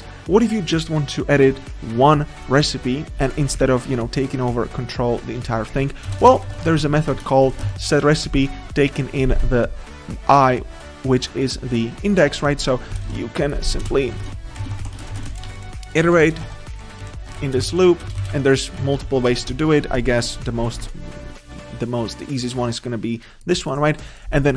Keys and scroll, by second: 7.2 Return, 7.5 Return, 19.3 Tab.